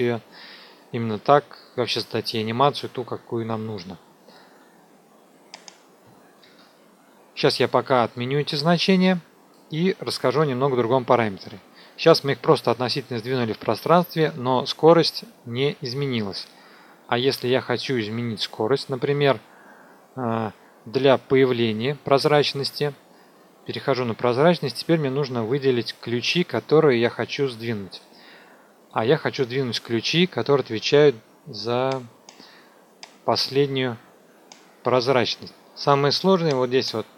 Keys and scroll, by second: 6.4 ctrl+z, 22.1 t.